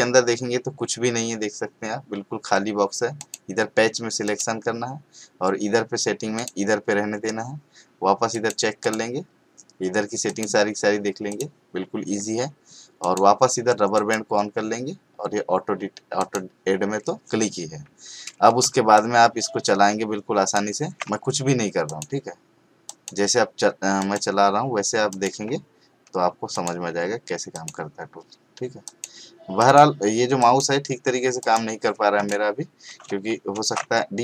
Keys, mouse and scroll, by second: 3.2 click, 6.3 click, 8.3 click, 16.2 click, 18.6 space, 18.9-20.8 ctrl+click, 33.5 ctrl+alt+z.